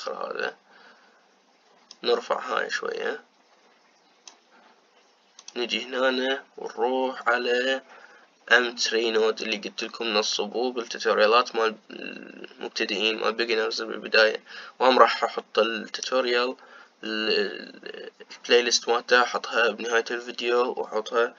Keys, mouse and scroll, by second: 3.3-21.3 drag.